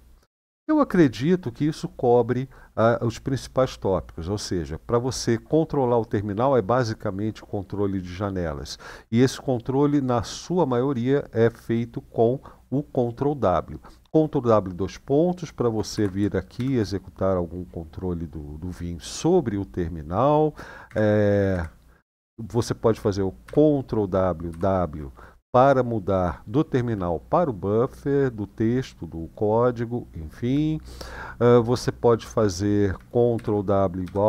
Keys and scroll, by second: 15.7 ctrl+w, 16.3 shift+;, 20.6 Escape, 21.2 Escape, 23.2 ctrl+w, 24.2 ctrl+w, 33.1 ctrl+w, 33.8 =.